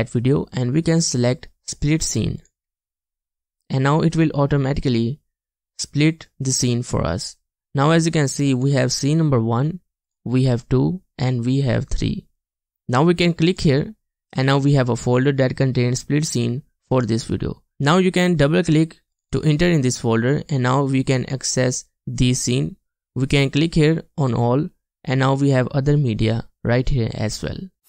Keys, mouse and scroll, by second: 19.3 double click.